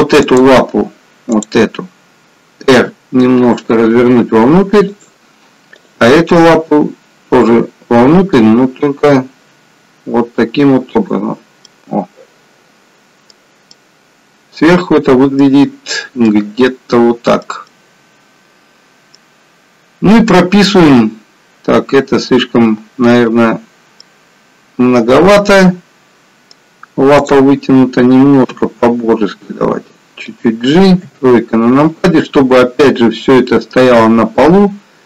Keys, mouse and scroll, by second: 0.2 click, 1.3 click, 2.9 r, 6.9 r, 11.7 middle click, 17.7 middle click, 25.5 middle click, 27.2 click, 28.7 g, 31.0 KP_3.